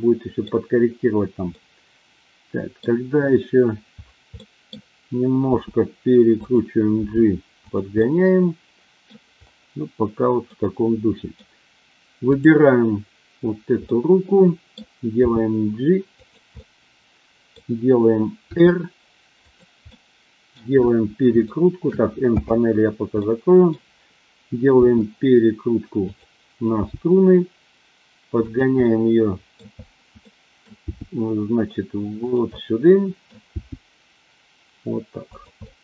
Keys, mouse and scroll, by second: 1.5-2.8 middle drag, 1.5 scroll up 1, 4.3 middle click, 5.5 r, 6.4 click, 7.0 g, 7.6 click, 7.9-9.1 middle drag, 10.5-11.4 middle drag, 12.3 click, 13.9-14.8 middle drag, 15.1 g, 16.1 click, 16.5-17.5 middle drag, 18.5 r, 19.5 click, 19.9-20.5 middle drag, 21.4-21.8 shift+middle drag, 22.4 n, 23.1-23.6 middle drag, 24.8 r, 26.0 click, 26.6 g, 28.4 click, 28.9-29.5 middle drag, 30.3 middle click, 30.8 g, 32.1 click, 32.5 scroll up 1, 32.6-33.1 middle drag, 33.1 scroll down 1, 33.5 g, 35.4 click, 35.7-35.8 middle drag.